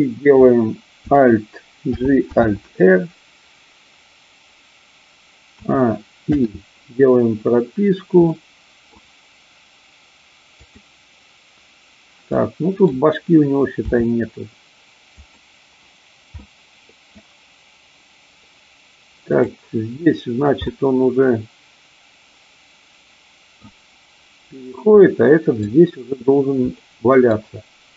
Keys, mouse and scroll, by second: 1.8 alt+g, 2.4 alt+r, 5.4 a, 6.3 i, 8.3-8.9 middle drag, 10.4 click, 12.3-12.9 middle drag, 13.8 r, 15.2 click, 16.4 middle click, 19.3 click, 20.6-23.6 middle drag, 24.9-25.7 middle drag, 26.8-27.4 middle drag.